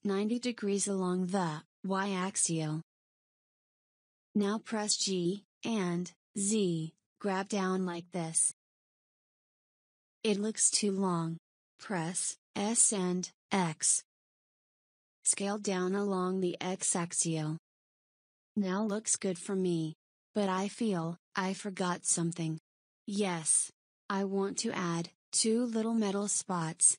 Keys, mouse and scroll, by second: 4.8 g, 10.7 s, 17.7 click, 19.4-22.0 shift+middle drag, 22.0 click, 25.0-26.9 middle drag.